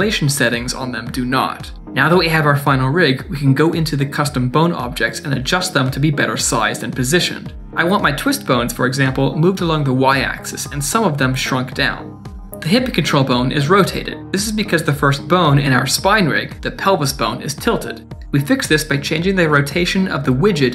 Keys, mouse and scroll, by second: 1.7 click, 4.5 Tab, 6.6 middle click, 6.8 click, 6.9 click, 7.3 middle click, 7.4 shift+middle click, 7.4 click, 7.5 click, 7.7 Tab, 7.9 click, 8.0 click, 8.0 KP_Decimal, 8.4 click, 8.5 scroll down 2, 8.6 middle click, 8.7 click, 8.8 click, 9.0 Tab, 9.1 click, 9.2 click, 9.4 Tab, 9.5 middle click, 9.6 shift+middle click, 9.6 click, 9.8 click, 10.0 Tab, 10.1 click, 10.3 click, 10.6 Tab, 10.7 middle click, 10.8 shift+middle click, 10.8 middle click, 10.9 click, 11.0 click, 11.1 KP_Decimal, 11.4 click, 11.6 click, 11.7 Tab, 11.9 click, 12.0 click, 12.2 Tab, 12.2 scroll down 2, 12.3 shift+middle click, 12.3 middle click, 15.0 click, 15.4 shift+click, 15.8 scroll up 2, 16.0 click, 16.3 shift+middle click, 16.5 middle click, 16.6 shift+middle click, 17.3 shift+click, 17.6 click, 18.7 click, 19.5 click, 19.8 ctrl+z, 19.9 click, 20.1 ctrl+z, 20.6 middle click.